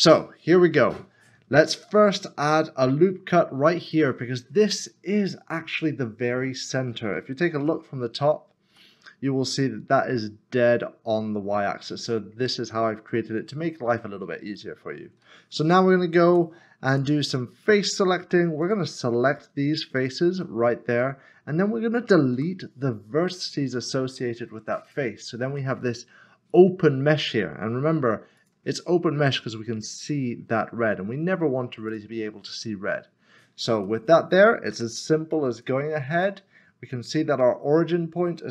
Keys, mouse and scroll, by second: 4.0 click, 5.7 middle click, 7.7-8.7 typing, 11.8 middle click, 14.5 middle click, 16.9 click, 18.6 click, 19.4 s, 21.0 middle click, 22.3 x, 24.8 x, 25.5 click, 25.7 middle click, 28.4 click, 31.9 click, 32.5 middle click, 34.7 Tab, 35.5 click.